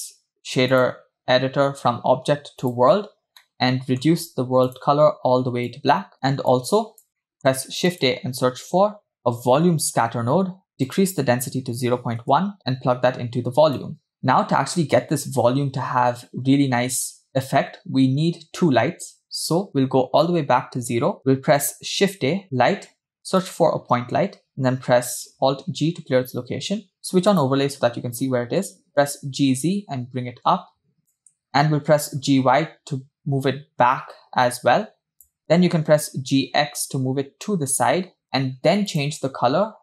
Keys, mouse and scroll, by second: 0.7-2.8 drag, 3.4 middle click, 4.7 click, 6.5 click, 6.9 click, 7.2 middle click, 7.4 shift+a, 11.1-12.6 drag, 12.7-14.2 drag, 20.5-21.2 drag, 22.0 shift+a, 25.6 alt+g, 27.5 drag, 28.9 g, 31.9 g, 36.0 g, 38.9 click.